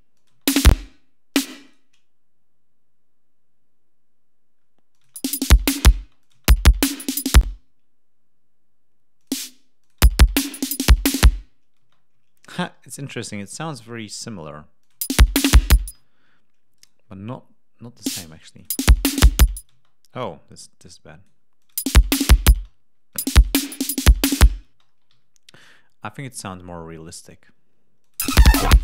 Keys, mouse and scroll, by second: 0.0 ctrl+click, 0.2 space, 0.8 d, 1.2 shift+click, 4.8 click, 5.0 space, 5.9 space, 6.1 click, 7.3 space, 9.1 click, 9.7 click, 9.9 space, 11.7 space, 12.1 ctrl+scroll down 2, 14.7 click, 14.9 space, 15.8 space, 15.9 ctrl+scroll up 2, 16.7 shift+right click, 17.9 click, 18.5 click, 18.6 space, 19.6 space, 20.7 click, 21.5 click, 21.7 space, 22.5 ctrl+space, 22.5 ctrl+scroll down 2, 23.1 space, 23.3 ctrl+click, 24.1 ctrl+scroll up 2, 24.6 space, 24.8 ctrl+scroll down 2, 25.0 g, 25.8 ctrl+scroll down 2, 27.9 click, 28.1 space, 28.3 scroll down 2.